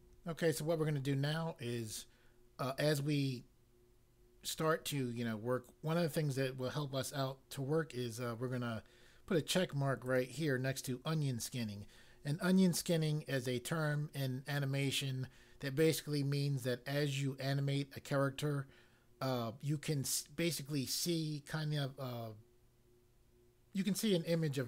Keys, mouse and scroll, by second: 10.0 click.